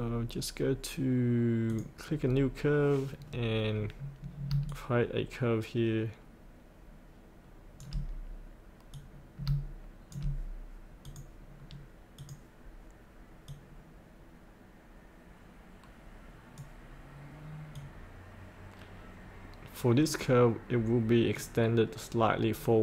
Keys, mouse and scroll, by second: 1.6 click, 3.2-4.5 scroll down 1, 4.6-6.1 shift+drag, 6.2-7.8 shift+drag, 8.9 click, 11.0-17.3 drag, 18.4-22.8 drag.